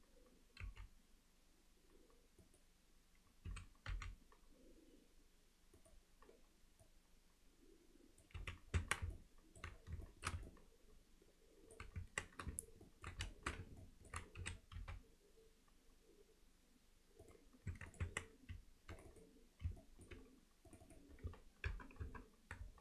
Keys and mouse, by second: 0.6 g, 3.5 s, 6.9-8.3 drag, 8.4 z, 8.8 Tab, 9.1-9.6 middle drag, 10.1 alt+shift+middle click, 10.5-11.8 alt+middle drag, 12.0 Tab, 12.9 ctrl+alt+middle click, 13.3 alt+shift+middle click, 13.8 ctrl+alt+middle click, 14.4 s, 17.7 Tab, 17.9 click, 18.1 Tab, 19.1 click, 19.8 alt+middle click, 20.7 click, 21.7 ctrl+KP_Add.